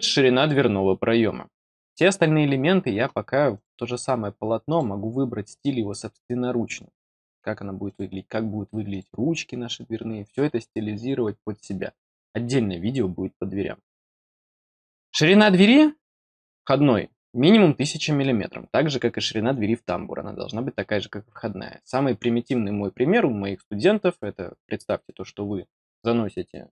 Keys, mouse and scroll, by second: 3.5 click, 4.6 click, 7.8 click, 8.8 click, 15.7 click.